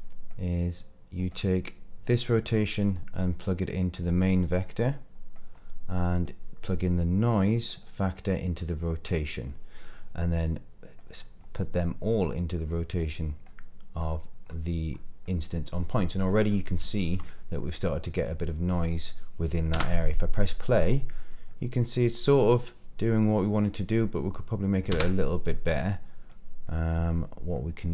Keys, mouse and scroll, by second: 0.3-1.3 drag, 2.2-3.9 drag, 4.4-5.4 drag, 5.5 middle click, 7.7 click, 7.8-9.1 drag, 9.4 middle click, 10.9 click, 11.3-13.0 drag, 13.4 middle click, 14.4 scroll up 1, 14.9 middle click, 15.7-16.3 middle drag, 16.5 scroll up 2, 16.8 shift+middle drag, 17.2-17.6 middle drag, 17.7-18.0 scroll down 2, 18.0-19.1 middle drag, 19.7 space, 20.5-21.2 middle drag, 21.5-22.0 middle drag, 23.3-23.7 middle drag, 23.8 scroll down 1, 24.9 space, 25.5 middle click, 26.0 scroll down 2, 26.3 middle click, 26.9 scroll up 1, 27.1 middle click, 27.8 scroll up 2.